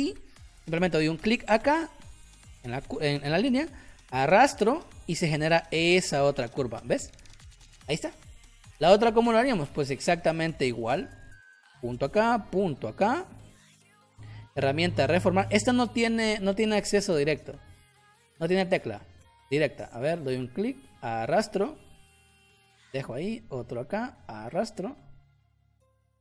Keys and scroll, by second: 8.4 space.